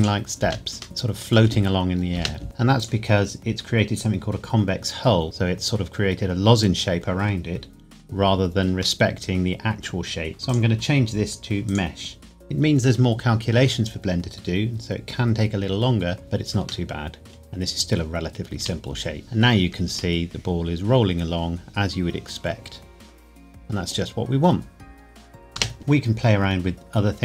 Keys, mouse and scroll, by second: 0.0 click, 0.4 space, 0.8 middle click, 2.1 space, 2.8 click, 9.0 middle click, 10.5 click, 16.8 middle click, 18.5 space, 20.2 middle click, 25.6 space, 25.8 click.